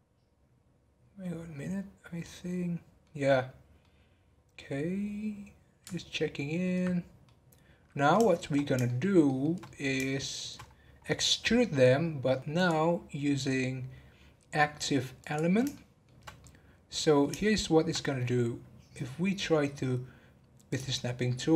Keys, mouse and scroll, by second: 3.8-6.9 middle drag, 6.9-7.2 scroll down 3, 7.2-8.5 middle drag, 8.5 scroll up 3, 8.8-10.6 shift+middle drag, 10.6-11.0 scroll up 5, 12.5-15.5 drag, 15.7 shift+middle click, 16.3 scroll up 1, 16.4-17.8 middle drag, 17.8-19.6 scroll up 1, 19.6-20.6 scroll up 1, 20.6 click.